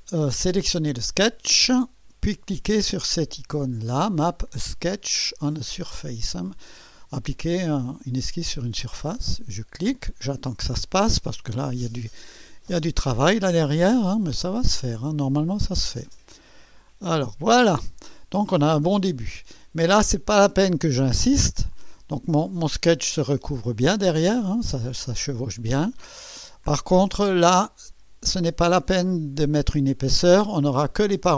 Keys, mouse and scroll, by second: 0.5 click, 9.0 click, 18.4-20.1 drag, 21.7-23.2 drag, 25.2 click, 27.3 click.